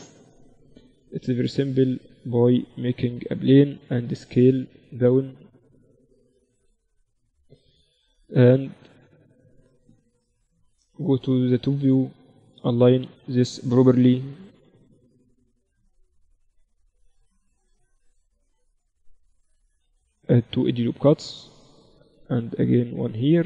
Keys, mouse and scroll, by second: 0.6-2.5 drag, 1.3 shift+a, 3.6 s, 5.1 s, 8.7 Tab, 10.4 KP_7, 11.7 a, 12.5-14.5 drag, 12.9 a, 13.1 a, 13.8 b, 15.0-16.9 drag, 16.2 a, 16.9 ctrl+r, 19.6 s, 21.3 ctrl+r.